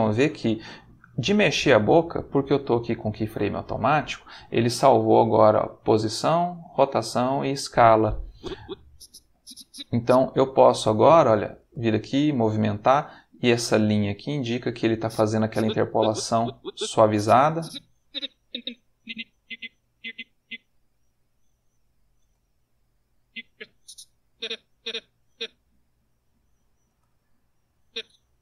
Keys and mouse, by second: 8.3-9.9 drag, 10.4 g, 11.6 space, 15.0-20.6 drag, 20.9 g, 22.2 space, 23.2-25.1 drag, 25.7 g, 26.9 space, 27.7-28.4 drag.